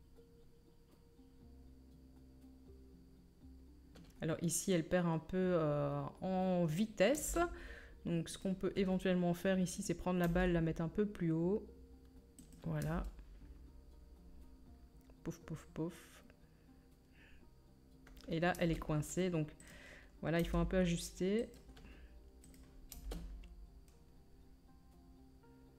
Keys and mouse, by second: 7.2 space, 9.8 right click, 10.2 g, 10.7-25.7 drag, 12.8 space, 18.5 space, 19.6 middle click, 19.6 right click, 20.4 g, 22.5-25.7 right drag, 22.9 space.